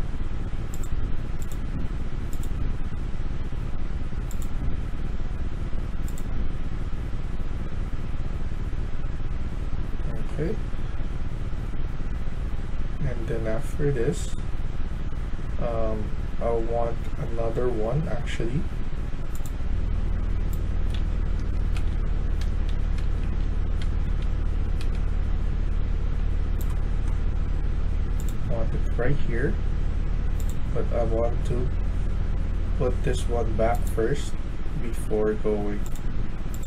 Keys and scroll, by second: 19.9-24.7 typing, 26.0 d, 30.7 d.